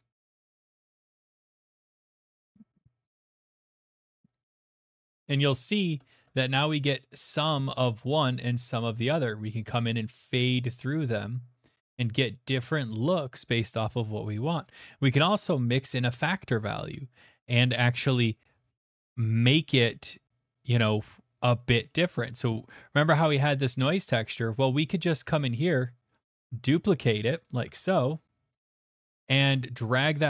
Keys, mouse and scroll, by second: 0.0 click, 3.2 ctrl+z, 3.6 click, 5.2 middle click, 5.7 shift+middle click, 6.2 shift+middle click, 14.6 click, 21.9 middle click, 22.4 middle click, 23.1 click, 25.0 click, 25.3 middle click, 26.1 click, 26.5 s, 27.4 click, 27.6 d, 28.5 click, 30.1 click.